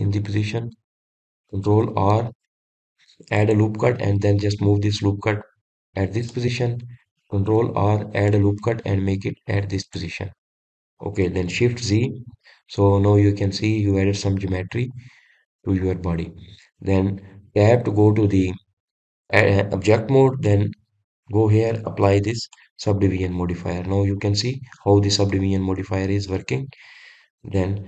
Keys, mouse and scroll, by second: 1.4-1.8 scroll down 1, 3.1 ctrl+r, 7.6 click, 8.9 ctrl+r, 11.3 click, 11.8-13.2 middle drag, 13.2 shift+z, 13.9-18.9 middle drag, 18.9 Tab, 19.7-21.9 middle drag, 21.9 click, 24.8-25.9 middle drag, 25.9-26.5 scroll up 1, 26.5 scroll up 4, 26.6-27.8 middle drag.